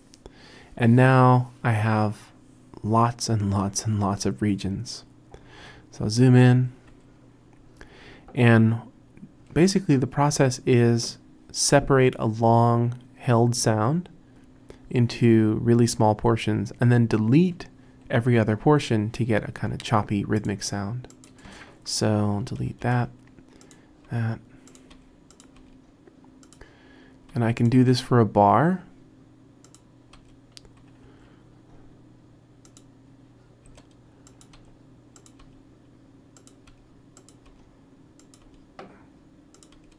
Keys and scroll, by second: 6.3 t, 6.6 t, 6.9 t, 22.8 BackSpace, 24.1 BackSpace, 25.0 BackSpace, 25.6 BackSpace, 27.4 BackSpace, 27.9 BackSpace, 30.2 BackSpace, 31.0 r, 33.7 BackSpace, 34.6 BackSpace, 35.4 BackSpace, 36.8 BackSpace, 37.5 BackSpace, 38.4 BackSpace, 39.8 BackSpace.